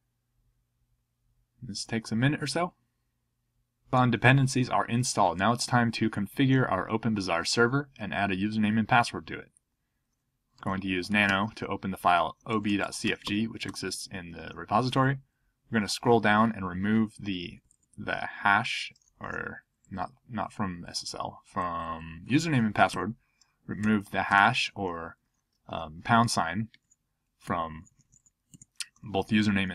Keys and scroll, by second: 10.3-13.7 typing, 15.3-16.1 Down, 18.5 Up, 20.0-20.8 Down, 21.6 Up, 22.2 Up, 22.9 ctrl+d, 23.7 ctrl+n, 24.3 ctrl+d, 24.6 ctrl+p, 26.8 alt+BackSpace, 27.4 BackSpace.